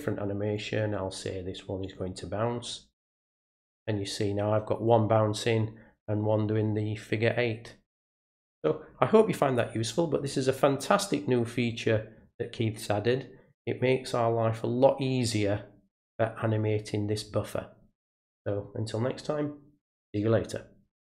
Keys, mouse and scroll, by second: 0.5 click, 1.8 click, 3.0 click.